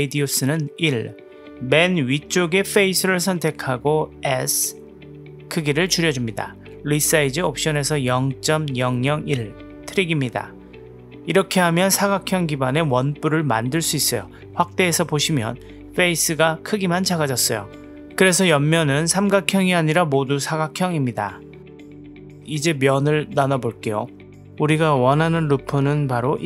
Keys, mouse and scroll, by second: 1.3 click, 2.2 Tab, 2.7 click, 3.1 click, 3.9 middle click, 4.7 s, 6.3-8.9 drag, 8.3 KP_0, 12.8 click, 13.3 click, 15.2 KP_Decimal, 17.3-20.3 middle drag, 20.5 a, 20.5 KP_Decimal, 21.2 middle drag, 21.5 Tab, 21.7-22.5 middle drag, 22.8-23.4 right drag, 23.6 click, 24.2 Tab, 25.3 click, 26.1 click.